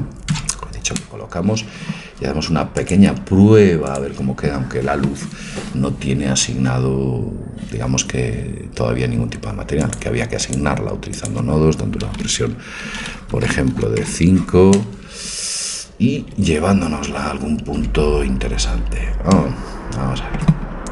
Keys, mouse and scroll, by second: 0.3 KP_0, 2.8-4.7 drag, 9.8-13.0 drag, 16.3 Escape, 17.9 Tab.